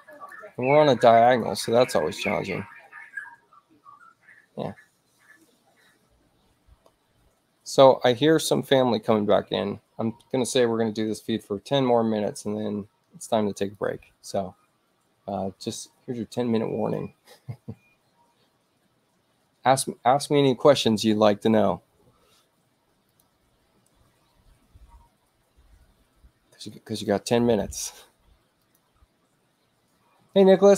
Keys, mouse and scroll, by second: 0.2 right click, 1.3 click, 6.8 space, 12.3 click, 13.6 ctrl+click, 15.3-17.0 drag, 23.1 click, 28.7 click.